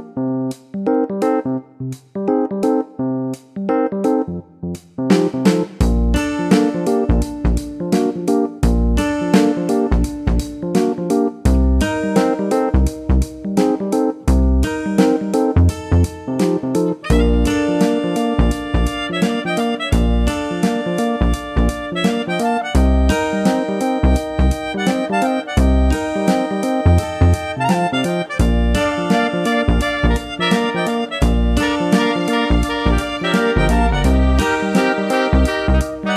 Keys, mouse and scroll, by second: 1.6 click, 3.1 click, 4.0 click, 7.0-9.0 typing, 10.5 click, 11.7 click, 20.1 click, 21.8 click, 24.1 click, 25.4 click, 28.0 click, 28.7 click, 31.3 click, 35.7 click.